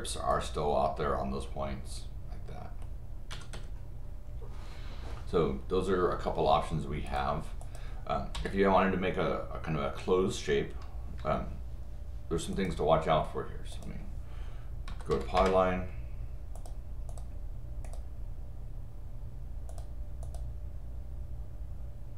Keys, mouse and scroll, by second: 0.3 click, 3.3 Escape, 7.1 click, 7.6 click, 12.5 click, 13.7 click, 15.4 Return, 16.6 click, 17.1 click, 17.8 click, 19.7 click, 20.2 click.